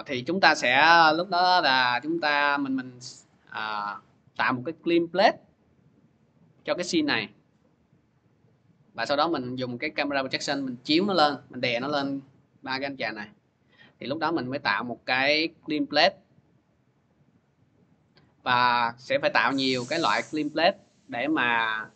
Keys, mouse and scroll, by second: 3.1 click, 7.0 click, 10.2 click, 13.5 click, 15.1 click, 17.1 click, 17.3 click, 18.0 click, 18.2 click, 18.8 scroll, 21.3 click.